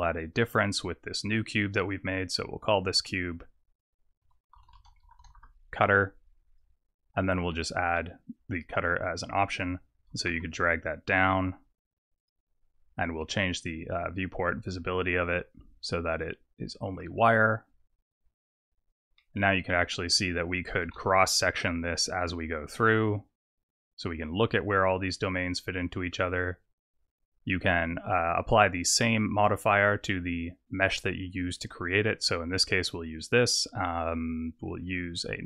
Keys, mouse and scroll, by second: 1.9 click, 2.8 click, 2.9 click, 3.7 click, 3.8 click, 5.0 t, 6.4 click, 7.9 click, 9.9 click, 10.1 g, 13.6 click, 15.1 click, 16.1 click, 16.9 click, 18.9 click, 19.1 middle click, 20.2 click, 20.7 g, 31.5 click, 32.8 click, 35.0 click.